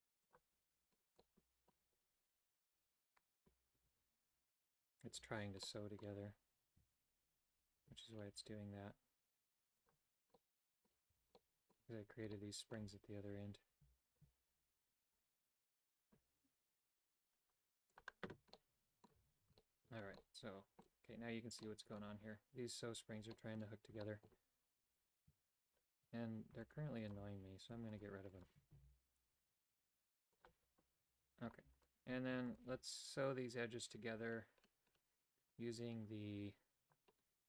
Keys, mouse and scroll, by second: 0.3 click, 1.2 middle click, 3.7 l, 5.2 l, 5.6 middle click, 6.8 a, 8.4 g, 10.4 middle click, 11.2 a, 11.4 middle click, 12.4 middle click, 14.1 alt+right click, 14.5 g, 18.6 middle click, 19.2 a, 19.6 shift+middle click, 20.2 middle click, 21.6 middle click, 23.4 middle click, 24.0 shift+middle click, 25.0 right click, 25.7 shift+right click, 26.7 shift+right click, 27.1 shift+right click, 27.9 shift+right click, 28.4 shift+right click, 28.7 x, 32.6 alt+shift+click.